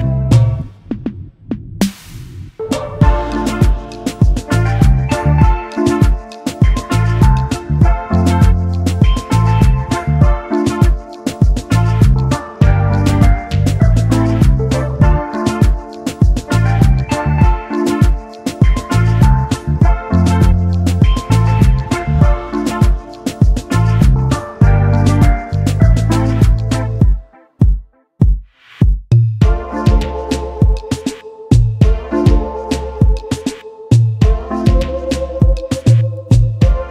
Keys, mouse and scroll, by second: 0.9 shift+click, 1.4 alt+scroll down 1, 1.7 alt+click, 1.8 space, 1.9 double click, 2.3 alt+scroll up 1, 3.6 double click, 4.3 alt+click, 9.3 shift+click, 13.8 double click, 16.3-16.7 alt+scroll down 1, 20.1 space, 21.4 alt+scroll up 1, 22.3 alt+scroll up 1, 22.4 shift+click, 24.9 ctrl+g, 25.7 alt+scroll down 1, 26.5 space, 27.0 alt+scroll up 1, 27.3 alt+click, 27.4 space, 29.0 alt+shift+click, 29.6 double click, 31.3 double click, 31.4 alt+scroll up 1, 32.2 double click, 33.1 shift+click, 33.9 shift+click, 35.1 alt+scroll down 2, 35.5 ctrl+z, 36.6 double click.